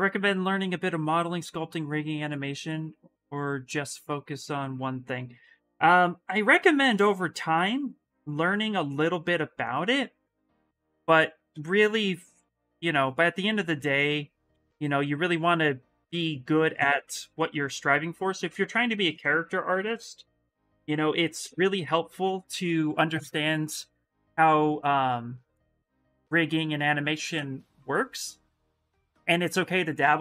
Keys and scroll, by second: 5.5 s, 11.3 ctrl+z, 11.7 s, 14.2 s.